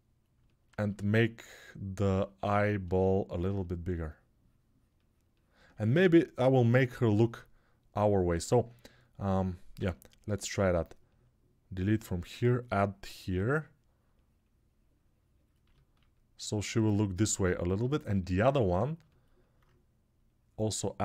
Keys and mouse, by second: 2.0-6.8 alt+drag, 6.8-9.9 middle drag, 9.5 s, 9.9-16.7 drag, 19.0-21.0 alt+drag.